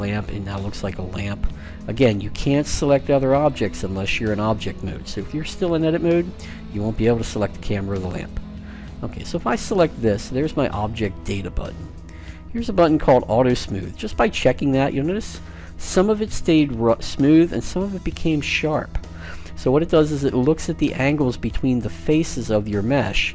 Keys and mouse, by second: 2.1-10.5 right drag, 10.9-12.7 drag, 13.9-15.5 drag, 15.5-17.7 middle drag.